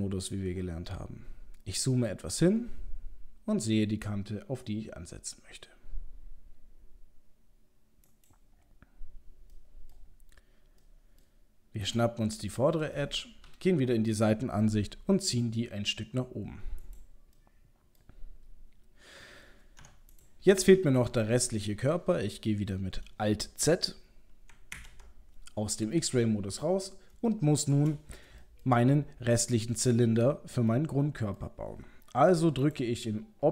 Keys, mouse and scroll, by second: 1.0-1.7 scroll up 1, 1.7-2.4 scroll up 4, 2.4 g, 8.6-9.0 scroll down 2, 9.6 middle click, 9.6-9.9 scroll down 3, 10.1-10.8 scroll down 2, 10.8 middle click, 10.8-11.2 scroll down 1, 11.2 middle click, 11.9 click, 12.4 middle click, 13.0 middle click, 13.5 KP_3, 13.9-14.9 scroll up 3, 15.0 g, 17.4 middle click, 18.3-19.8 scroll down 2, 19.8 Tab, 20.1 click, 20.6 middle click, 21.0 middle click, 24.8 alt+z, 26.0 middle click, 27.3 shift+middle click, 28.8 middle click, 30.7 middle click, 31.4 middle click, 32.7 click.